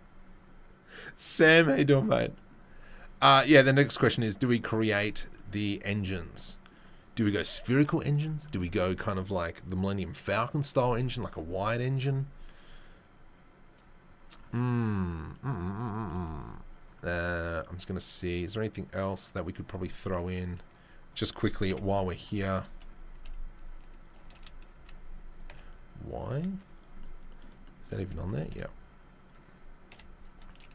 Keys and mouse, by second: 19.7-20.8 drag, 20.8-30.7 middle drag, 21.7 KP_7, 23.1 s, 24.1 g, 26.4 z, 28.4 s, 29.9 KP_7.